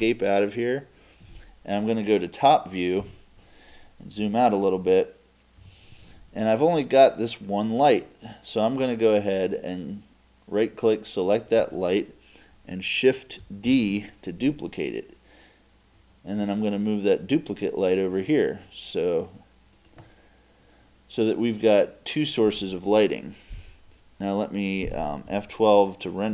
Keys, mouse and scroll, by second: 3.0 KP_7, 4.2 KP_Subtract, 4.5 KP_Subtract, 4.8 KP_Subtract, 5.6 KP_Subtract, 9.3-11.3 right drag, 13.7 shift+d, 19.9-21.9 drag.